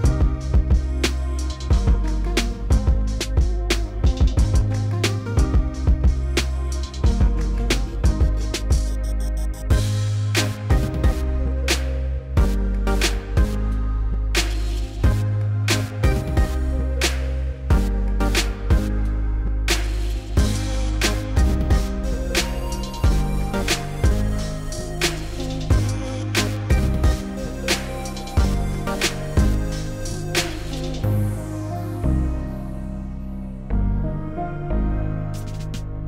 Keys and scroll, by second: 1.7 s, 6.1 2, 14.3-15.2 typing, 17.2 s, 20.7 4, 24.5 2, 29.1 s, 34.4 s.